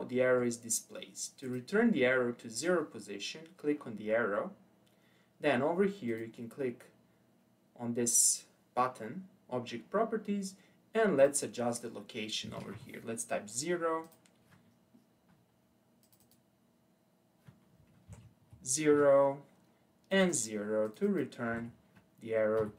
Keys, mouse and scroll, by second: 1.4 click, 6.1 click, 11.2-14.2 drag, 16.0-19.1 drag, 20.1-22.7 drag.